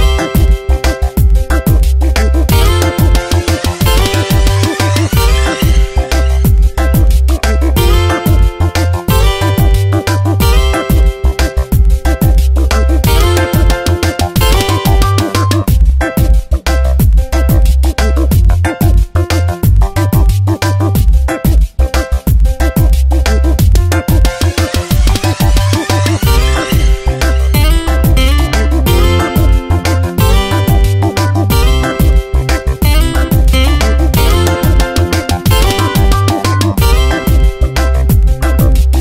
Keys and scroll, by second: 3.5 Delete, 6.0 ctrl+z, 6.3 Tab, 15.8 ctrl+z, 17.0 ctrl+z, 35.7 Tab, 38.4 Tab.